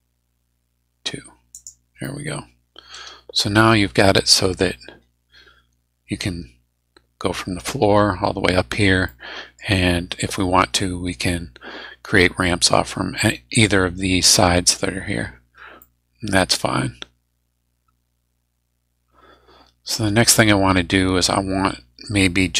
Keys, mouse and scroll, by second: 1.5 click, 2.0-4.6 middle drag, 9.0 click, 15.1 scroll down 2, 15.6 scroll up 2, 15.8-22.5 middle drag.